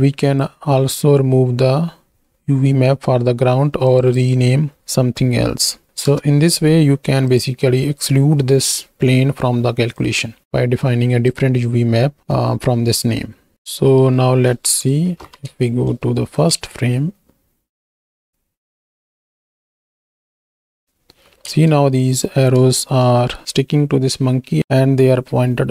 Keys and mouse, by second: 2.5 middle click, 3.9 click, 4.2-6.1 drag, 7.3 click, 9.9-11.4 drag, 13.0 middle click, 13.8 right click, 15.7 shift+Right, 15.8 shift+Left, 16.5 space, 21.5 space, 21.7-22.2 drag, 23.2 z, 24.6-25.7 drag.